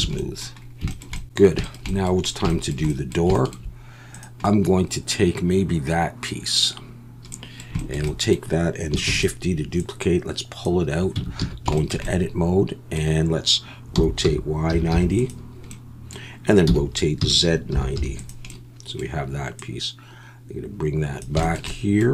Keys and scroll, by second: 0.0 alt+a, 9.1 shift+d, 11.2 Tab, 11.4 a, 13.9 r, 14.2 y, 14.7 9, 14.9 0, 16.7 r, 17.2 z, 17.7 9, 17.9 0.